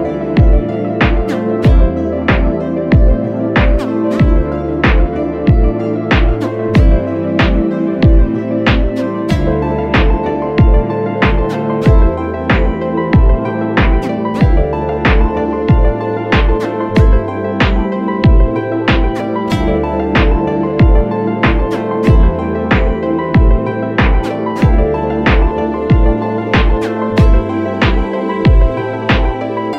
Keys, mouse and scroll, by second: 3.4 right click.